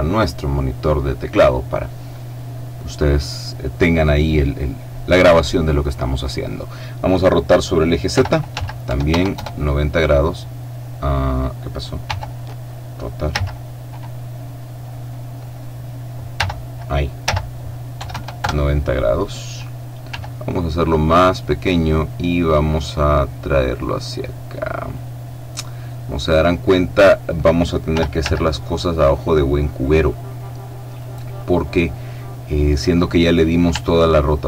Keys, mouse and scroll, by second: 8.1 r, 8.5 z, 8.9 KP_9, 9.1 KP_0, 9.3 KP_Enter, 12.0 r, 13.3 z, 14.4-16.1 drag, 16.3 r, 17.2 z, 17.9 KP_9, 18.1 0, 18.4 Return, 20.1 s, 21.3 click, 21.6 right click, 23.7-25.4 drag, 25.6-27.5 drag, 27.8 r, 28.2 z, 30.9 click, 31.7-33.1 middle drag, 33.1-33.9 scroll up 1, 33.9 shift+middle click, 34.1 shift+middle click.